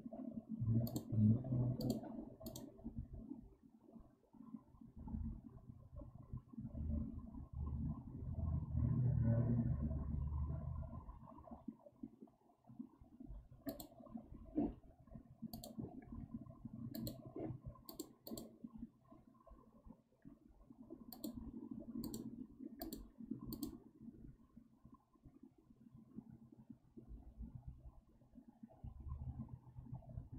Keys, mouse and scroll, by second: 15.4-18.1 drag.